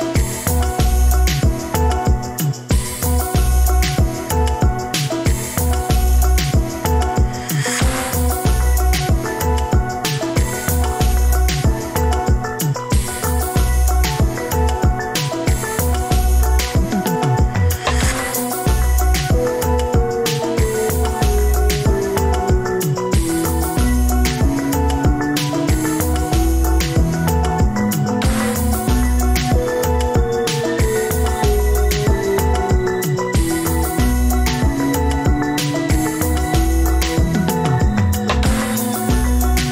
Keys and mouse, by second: 0.8 click, 2.6 shift+click, 3.8 click, 4.5 click, 5.8 shift+click, 10.3-11.8 middle drag, 12.6 ctrl+z, 13.4 g, 17.8-19.3 middle drag, 20.6-21.7 middle drag, 22.8-24.5 middle drag, 25.5 ctrl+r, 35.8-36.2 shift+middle drag, 36.3 alt+z, 37.1-38.1 ctrl+drag, 38.9 g.